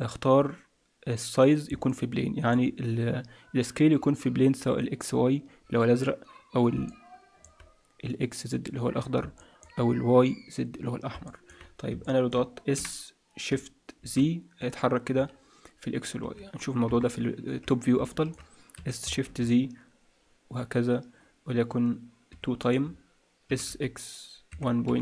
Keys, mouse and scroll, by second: 1.8 middle click, 6.8 middle click, 9.4 middle click, 11.2 middle click, 12.0 middle click, 12.7 s, 16.8 KP_7, 17.5-18.0 scroll down 3, 18.0 shift+middle click, 18.7 s, 22.8-23.4 scroll down 3, 23.4 scroll down 1, 23.4 s.